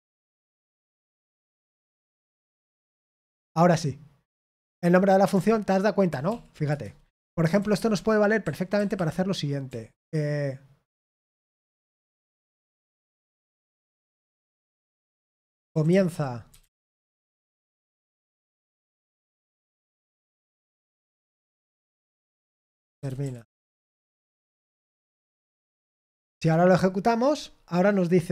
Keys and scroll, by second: 0.0-2.4 typing, 2.7 Return, 6.2 ctrl+p, 6.6 Return, 7.1-8.9 typing, 10.9-12.9 typing, 16.5-19.2 typing, 18.0 Escape, 22.3-24.3 typing, 25.7 Return, 25.7 typing, 26.0 ctrl+p, 26.1 ctrl+p, 26.3 Return.